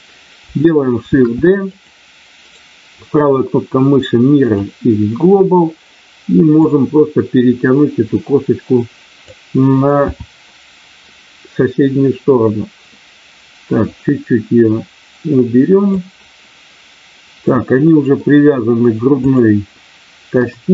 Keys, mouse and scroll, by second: 1.1 shift+d, 1.7 click, 3.8-6.6 right drag, 6.6-9.2 drag, 10.0 KP_7, 14.0-15.8 drag, 17.5 middle click, 19.2 click, 20.3 KP_1.